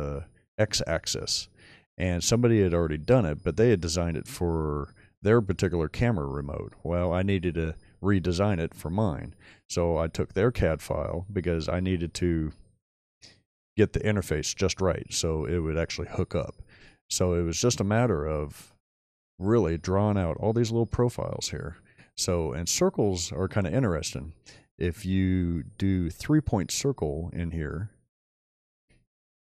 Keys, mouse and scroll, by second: 2.6-3.4 middle drag, 4.2-5.1 middle drag, 19.6-20.0 shift+middle drag, 28.9 middle click, 28.9-29.2 scroll up 2, 29.1-29.5 middle drag.